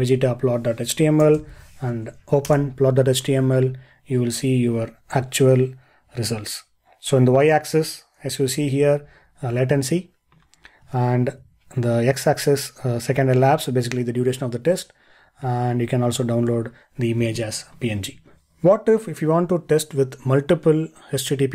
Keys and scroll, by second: 18.2 ctrl+l.